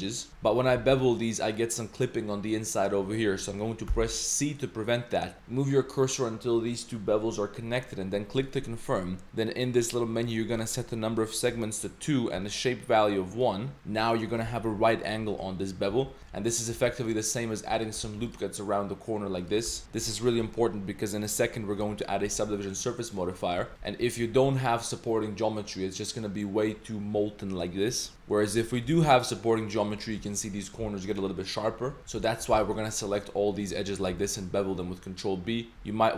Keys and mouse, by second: 0.3 shift+middle click, 0.8 ctrl+b, 10.7-11.8 drag, 12.9 click, 15.9 ctrl+z, 16.2 ctrl+r, 16.2 ctrl+z, 17.8 ctrl+r, 18.2 ctrl+r, 19.6 ctrl+z, 19.8 ctrl+2, 19.8 Tab, 19.8 ctrl+0, 21.8 ctrl+2, 22.1 3, 22.3 Tab, 22.6 middle click, 23.2 middle click, 23.6 Tab, 23.8 Tab, 23.8 middle click, 24.3 Tab, 24.4 click, 27.7 click, 28.1 Tab, 28.1 ctrl+r, 29.1 ctrl+r, 30.1 Tab, 30.2 click, 31.4 drag, 31.9 Tab, 32.0 Tab, 32.0 ctrl+z, 32.1 2, 32.5 shift+g, 33.8 click, 34.1 ctrl+b, 35.7 ctrl+z.